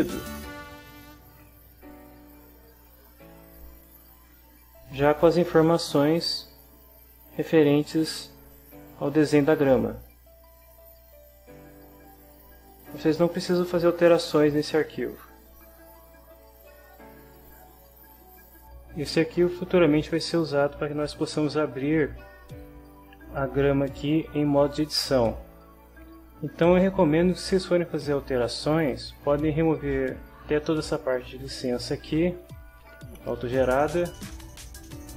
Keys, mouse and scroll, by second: 0.3 click, 6.4 click, 7.6-8.1 scroll down 1, 8.1 scroll up 1, 8.5-9.0 scroll down 1, 9.0-9.7 scroll down 1, 9.7-10.4 scroll up 1, 12.0-12.7 scroll up 1, 16.9 click, 17.5-18.6 drag, 30.0-34.1 drag, 34.8 click.